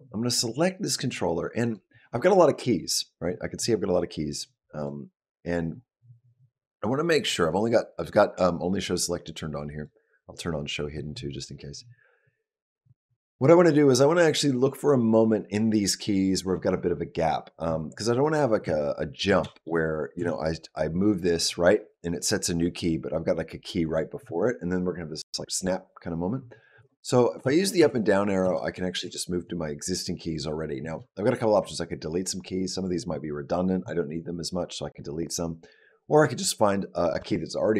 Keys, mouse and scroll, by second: 0.1 click, 0.9 click, 1.4 click, 4.6 click, 9.6 click, 18.5 ctrl+middle click, 19.3 shift+middle click, 20.1 Right, 26.7 Down, 27.3 Up, 27.7 Down, 28.3 Down, 28.9 Up.